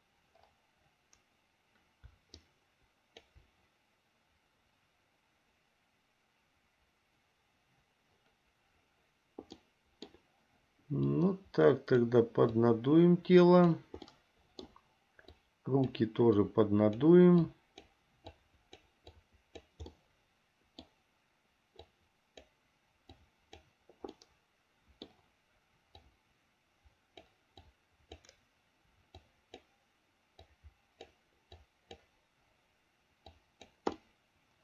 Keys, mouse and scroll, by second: 2.5 ctrl+click, 9.8 middle click, 11.3 click, 12.7-13.9 drag, 14.2 middle click, 15.6 click, 16.6 click, 17.7 click, 18.6 click, 19.3 click, 20.2 middle click, 22.0 click, 23.3 click, 24.3-25.3 middle drag, 26.2-27.5 drag, 27.9 click, 29.4 click, 30.7 click, 31.8 click, 33.5 click, 34.2-34.6 middle drag.